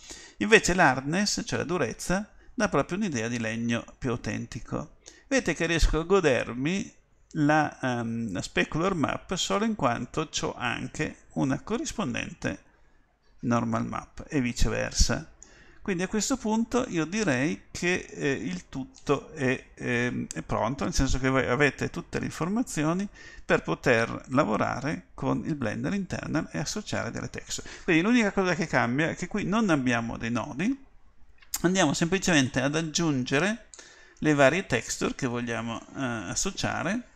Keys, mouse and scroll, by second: 4.8 middle click, 5.2 middle click, 5.9 middle click, 6.2 middle click, 7.2 middle click, 8.6 middle click, 9.0 middle click, 10.7-11.9 middle drag, 17.1 middle click.